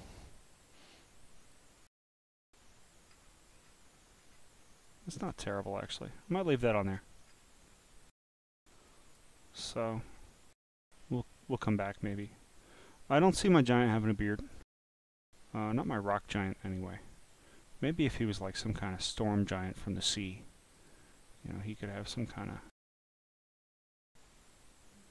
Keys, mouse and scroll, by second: 0.4-1.5 drag, 3.1-3.6 scroll down 6, 3.6 scroll up 6, 4.2 scroll down 3, 4.9 click, 5.5 scroll down 1, 5.8 scroll up 1, 6.2 click, 7.3 scroll up 5, 7.7 scroll, 8.9 click, 12.1 click, 20.8 click, 21.6 click.